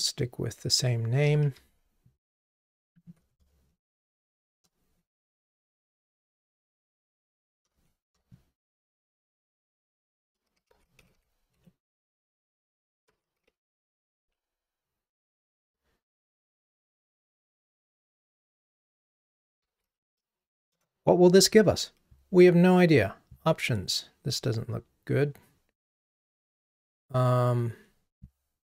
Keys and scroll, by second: 3.8 shift+super+Down, 4.4 shift+super+Up, 5.7 shift+super+Up, 5.8 super+/, 7.7 super+/, 7.8 shift+super+Down, 11.6 Escape, 20.9 Return.